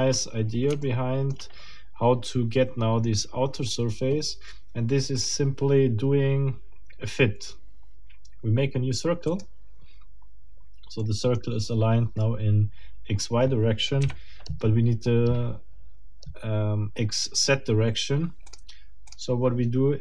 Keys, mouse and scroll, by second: 0.8 shift+middle click, 1.6 shift+scroll down 2, 5.2 click, 9.3 click, 11.0 middle click, 14.0 KP_1, 18.5 click, 19.1 click.